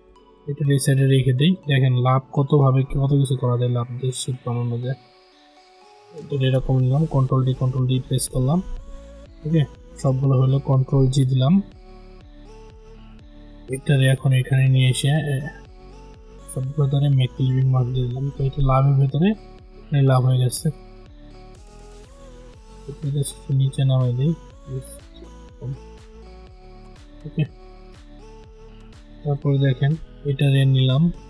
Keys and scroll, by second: 6.9 ctrl+d, 10.7 ctrl+g.